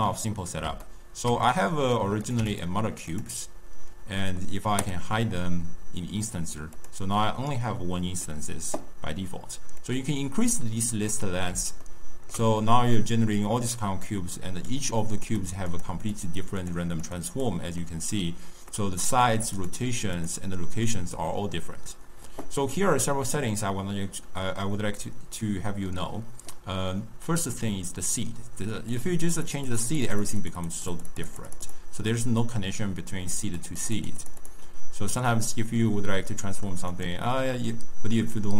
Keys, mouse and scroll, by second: 0.0-2.2 middle drag, 2.2 click, 3.0 click, 4.7-6.8 drag, 7.1-9.7 middle drag, 9.7-11.7 drag, 11.7-14.6 ctrl+middle drag, 14.6 click, 15.2 click, 15.6 click, 16.0 click, 16.5 click, 16.9 click, 17.3 click, 17.7-19.0 middle drag, 19.0 click, 19.5 click, 20.1 click, 20.8-23.9 middle drag, 28.8-35.4 drag, 35.4-36.8 middle drag, 36.8 click.